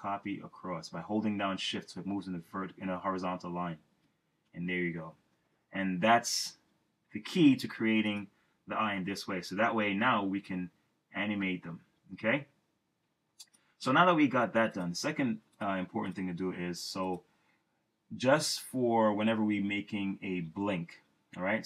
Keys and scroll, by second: 3.9 shift+Left.